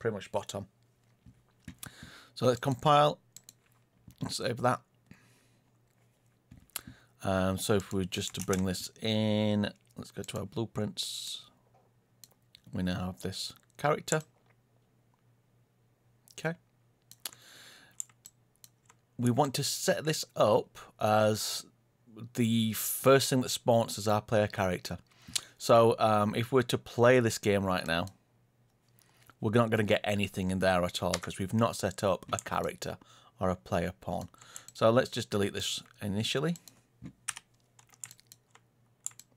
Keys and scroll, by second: 8.3 ctrl+space, 31.1 Escape, 37.2 Delete.